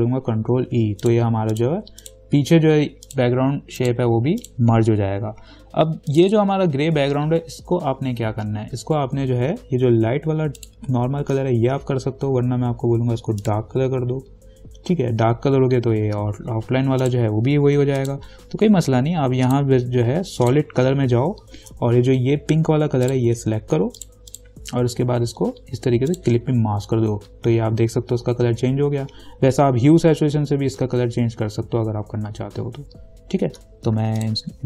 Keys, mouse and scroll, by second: 0.8 ctrl+e, 1.3 click, 10.8 click, 13.7 click, 17.3 click, 23.3 click, 26.3 alt+click.